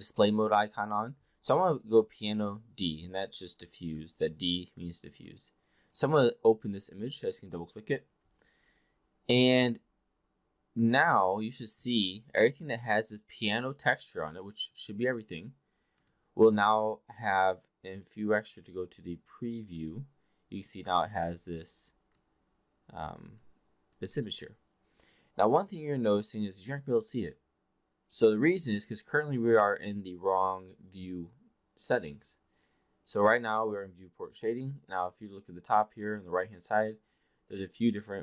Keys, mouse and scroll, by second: 12.5 click, 14.6 click, 15.1 click, 15.9 click, 16.5 click, 19.6 click, 20.6-21.1 drag, 21.2 click, 21.9 click, 23.3 click, 23.9 click.